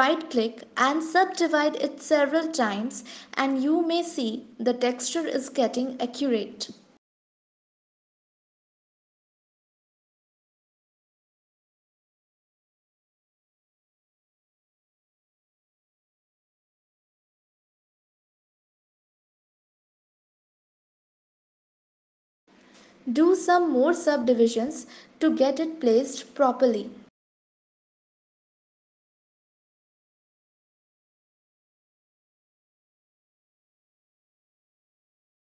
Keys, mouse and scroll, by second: 0.5 a, 0.8 right click, 4.9 click, 6.5 click, 7.0 click, 7.5 click, 8.0 click, 8.5 click, 9.1 click, 9.6 click, 10.4 click, 10.9 click, 12.0 click, 13.6 click, 15.2 Tab, 16.6 click, 22.7 Tab, 24.0 click, 25.5 right click, 31.7 click, 33.1 right click.